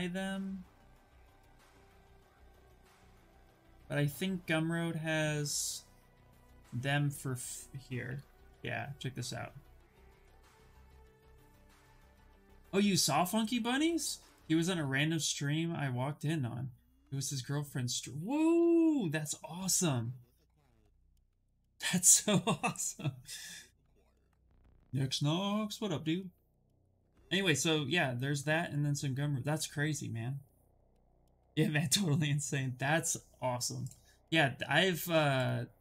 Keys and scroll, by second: 7.7 ctrl+c, 18.2 ctrl+v, 18.8 Return.